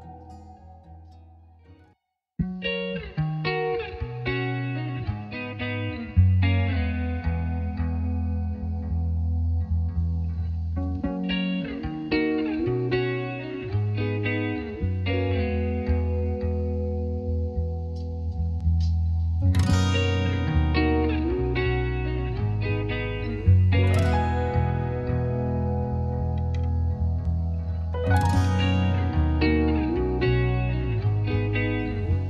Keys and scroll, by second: 30.2-31.5 typing, 31.8 Return.